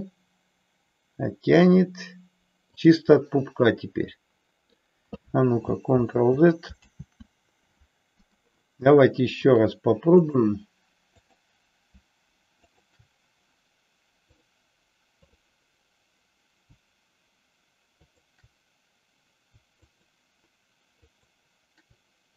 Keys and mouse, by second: 2.8 click, 3.3-4.9 middle drag, 6.2 ctrl+z, 6.9 ctrl+z, 9.5-10.5 drag, 11.3 click, 12.7 shift+click, 14.4-15.4 drag, 21.0 shift+click.